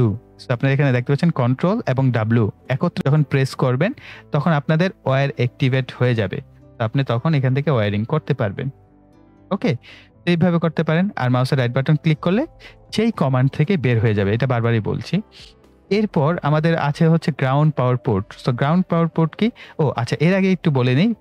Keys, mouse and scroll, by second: 7.5 click, 11.6 right click, 13.9 click.